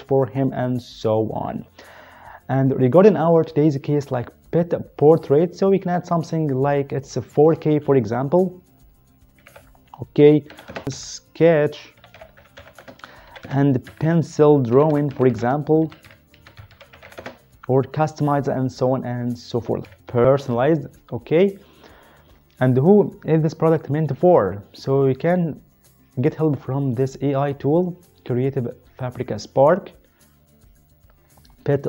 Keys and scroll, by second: 9.3 typing, 10.5-17.2 typing, 19.8-20.1 typing.